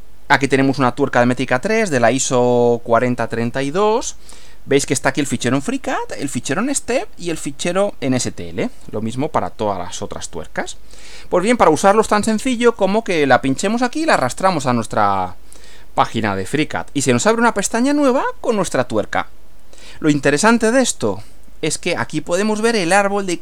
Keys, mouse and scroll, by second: 12.6-14.3 drag, 16.9 click, 18.0 scroll down 2, 18.7-20.0 middle drag.